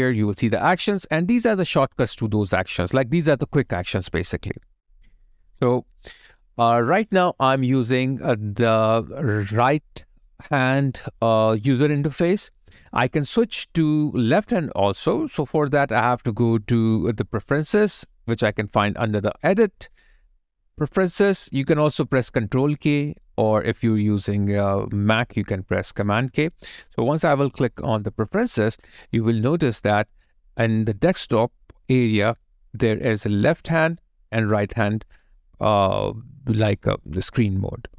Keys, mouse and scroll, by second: 7.3 alt+middle click.